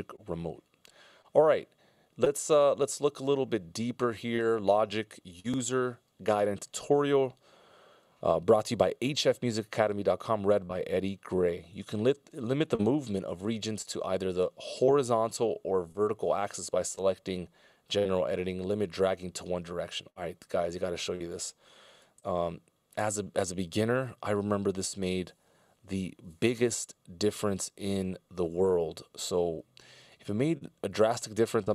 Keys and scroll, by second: 22.8 super+,.